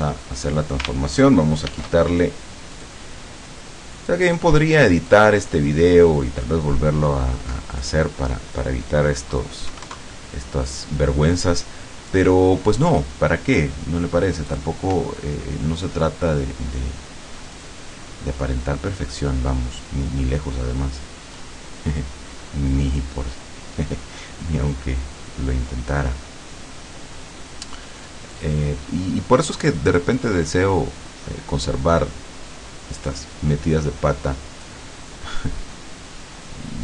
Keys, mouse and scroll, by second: 1.7 ctrl+shift+f, 2.7 click, 4.1 click, 5.1 click, 5.9 click, 7.7 click, 9.7 KP_5, 9.9 KP_Enter, 12.1 click, 14.5 click, 15.2-15.6 ctrl+scroll up 2, 17.6 click, 19.5 middle click, 21.4-23.3 drag, 24.1-26.2 drag, 28.1-30.0 drag, 30.5-31.5 middle drag, 33.1-34.9 drag, 35.1 middle click, 35.8 scroll up 1.